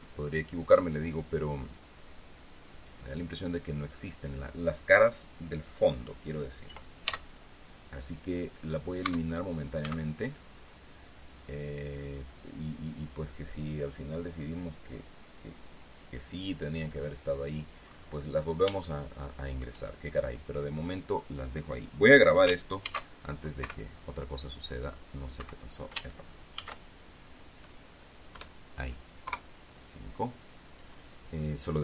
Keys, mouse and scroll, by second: 0.8 shift+right click, 1.8-4.0 scroll down 1, 4.0-7.2 scroll down 1, 7.2-7.6 scroll down 1, 7.6 x, 9.6 Tab, 10.4 z, 19.2 shift+scroll up 1, 19.4 shift+middle click, 23.4 ctrl+shift+s, 24.2 KP_Subtract, 25.9 Escape, 27.1 ctrl+shift+s, 28.9 KP_Add, 29.8 KP_Enter.